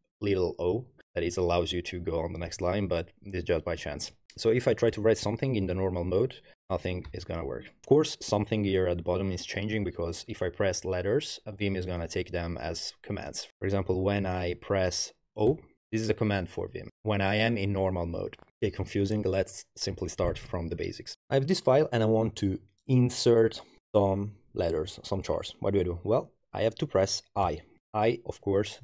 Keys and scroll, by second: 4.9 Escape, 6.3-8.0 typing, 15.5 o, 16.9 Escape, 27.5 i.